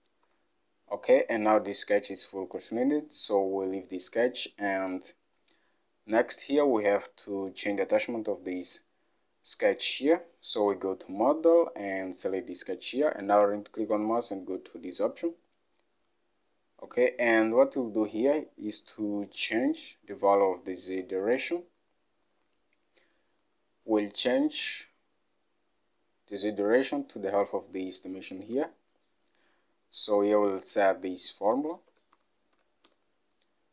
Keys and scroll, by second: 0.3 Delete, 21.1 alt+Tab, 28.4 alt+Tab, 31.8-33.7 typing.